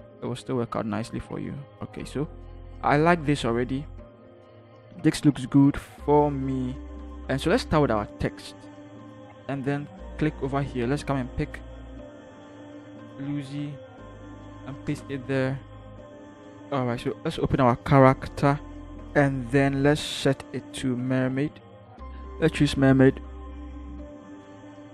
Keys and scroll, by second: 0.2 ctrl+-, 3.1 u, 3.1 0, 8.7 t, 8.9 ctrl+h, 13.4 ctrl+c, 14.6 ctrl+v.